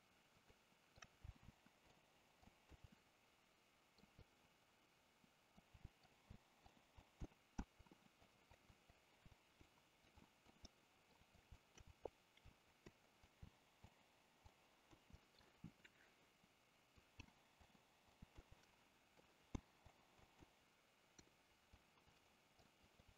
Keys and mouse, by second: 0.6 shift+middle click, 1.5 k, 2.9-4.0 middle drag, 4.3-5.7 middle drag, 5.9 middle click, 6.4 k, 7.6 KP_1, 8.3 click, 8.8 click, 9.3 Delete, 10.1 click, 10.7 middle click, 11.4 drag, 11.6 shift+middle drag, 12.1 click, 12.9 KP_7, 13.3 click, 13.4 k, 15.2 middle click, 15.8-17.0 middle drag, 17.2 k, 18.6 middle click, 19.6 k, 21.2 KP_7, 22.1 click, 22.9 click.